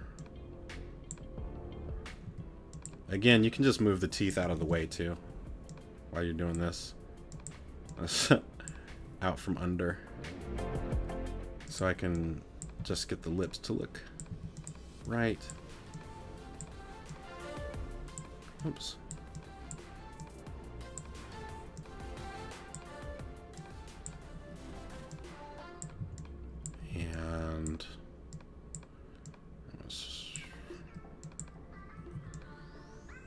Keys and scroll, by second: 2.3 t, 12.8 t, 14.3 t, 26.0 c, 32.1 c.